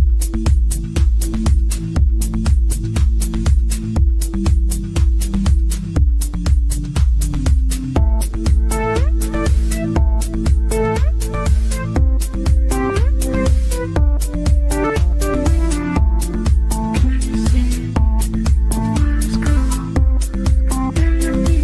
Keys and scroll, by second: 5.8 ctrl+z.